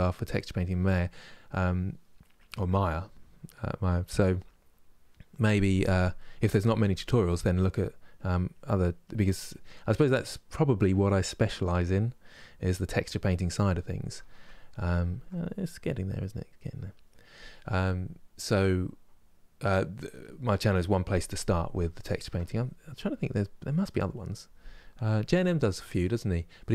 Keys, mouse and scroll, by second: 0.5-7.9 middle drag, 7.9-10.0 drag, 10.0 middle click, 10.8-12.0 drag, 12.0-13.0 middle drag, 13.0 click, 13.5-22.3 middle drag, 22.3 click, 23.0 middle click, 23.7-26.7 drag.